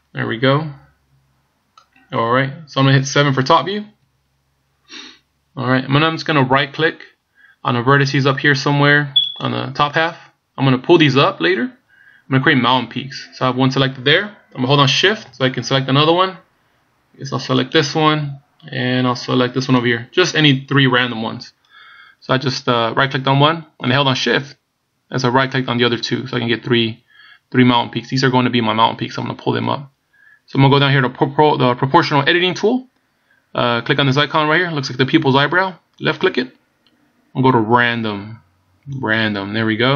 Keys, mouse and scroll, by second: 0.0 middle click, 4.1 KP_7, 9.5 right click, 17.8 shift+right click, 19.8 shift+right click, 36.0 click.